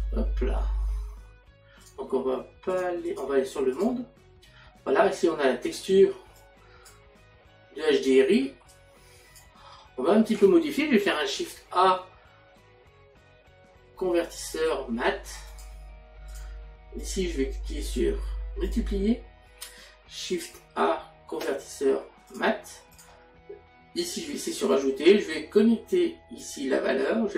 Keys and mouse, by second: 1.8 click, 6.4 click, 7.8 middle click, 15.5 click, 18.6 click, 22.3 click.